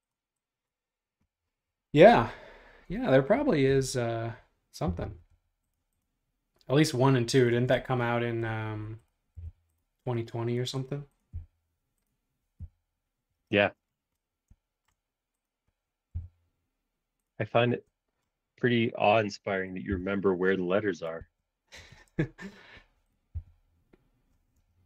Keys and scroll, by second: 3.8 q, 4.8 Left, 5.3 Right, 7.6 space, 9.4 m, 12.2 Up, 12.6 Up, 13.7 space, 16.1 m, 20.0 Up, 21.2 super+z, 21.9 shift+super+z, 23.3 Page_Up, 24.5 space.